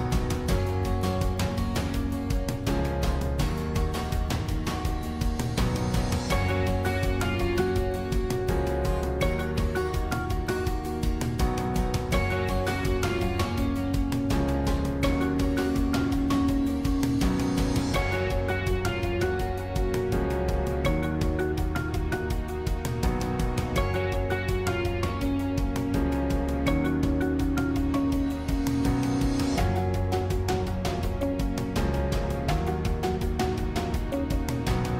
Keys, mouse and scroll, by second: 2.0 scroll down 1, 2.2-5.5 middle drag, 5.5 click, 7.0 shift+click, 7.8 shift+click, 9.0 shift+click, 10.3 shift+click, 10.9-11.3 scroll up 2, 11.5-14.6 middle drag, 14.6 ctrl+z, 14.8 ctrl+z, 15.1 ctrl+z, 15.5 ctrl+z, 15.9 ctrl+z, 16.2 ctrl+z, 17.0-18.3 middle drag, 18.3 scroll down 1, 21.7 shift+click, 23.7 shift+click, 24.2 shift+click, 24.7 shift+click, 25.7 shift+click, 26.3 shift+click, 28.0 shift+click, 30.4 click, 31.2 s.